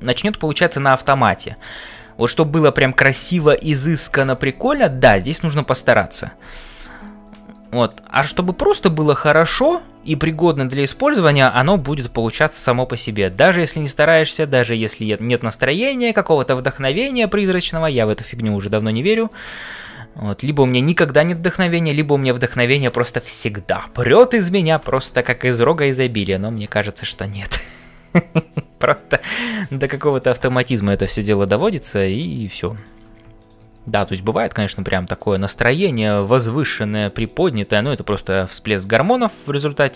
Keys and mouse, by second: 0.0-39.9 typing, 7.8 shift+middle click, 14.3 shift+middle click, 19.5 shift+middle click, 20.1 middle click, 26.7 shift+middle click, 29.2 middle click, 30.1 click, 32.7 click, 33.3 shift+click, 37.1 click, 39.2-39.9 middle drag.